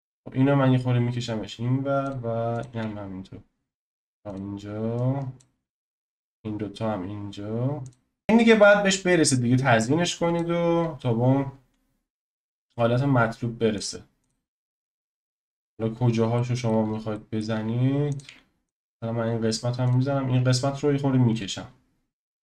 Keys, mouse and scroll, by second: 2.6 click, 2.7 g, 5.4 click, 5.6 g, 8.2-10.4 scroll up 2, 10.4 click, 12.2 g, 14.3 click, 14.5-15.8 scroll down 10, 16.0-16.3 scroll up 3, 16.3 shift+middle click, 16.8-17.1 scroll up 3, 17.1-18.2 shift+middle drag, 18.2 click, 18.3 x, 19.9 click, 20.1-20.8 scroll up 3, 20.8-22.3 scroll up 2, 22.3 g.